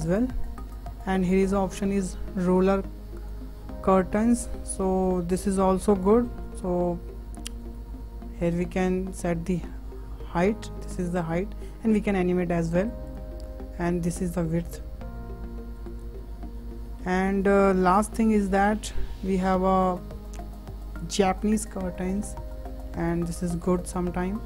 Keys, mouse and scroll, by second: 0.0 Delete, 3.2 click, 4.0-4.4 middle drag, 4.4 scroll up 4, 4.9-5.5 shift+middle drag, 5.5-6.1 scroll up 2, 6.1-9.1 shift+middle drag, 9.1-12.4 drag, 13.9-16.0 drag, 16.5-16.9 scroll down 3, 16.9 shift+middle click, 17.3 shift+click, 18.0 Delete, 18.2 Delete, 21.0-21.8 drag, 21.8 scroll down 4, 22.0 middle drag, 22.3-23.1 scroll up 4, 23.1-23.6 scroll up 1, 23.6 click.